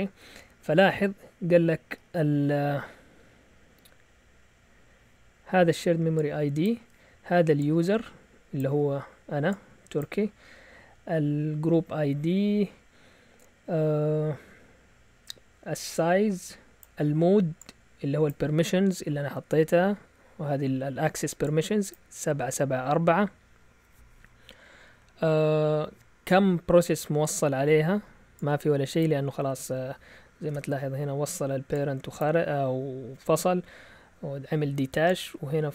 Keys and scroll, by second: 30.5 alt+Tab.